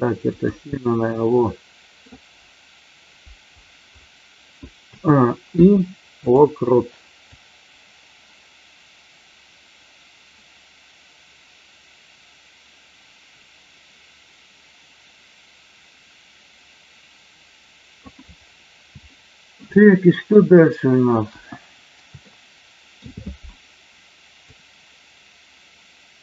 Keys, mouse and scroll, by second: 0.3 click, 0.8-2.0 middle drag, 4.8 a, 5.5 i, 7.4-18.0 drag, 19.0 shift+middle click, 19.8 middle click, 22.3 shift+middle click, 24.5-26.2 drag.